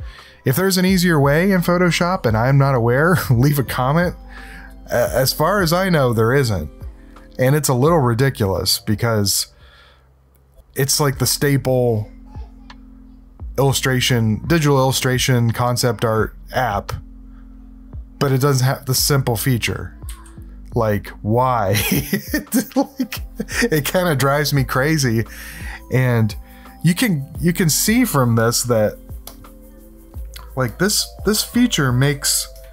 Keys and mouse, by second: 20.1 s, 29.2 click, 30.7 click, 31.5 click, 32.0 s, 32.5 ctrl+=.